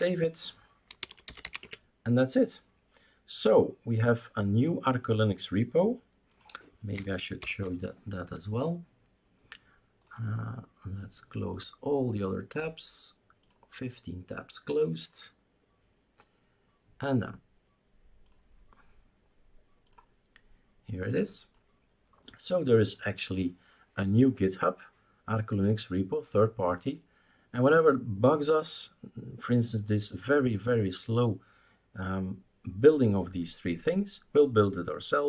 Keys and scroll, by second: 1.9-2.6 typing, 7.4 ctrl+alt+f.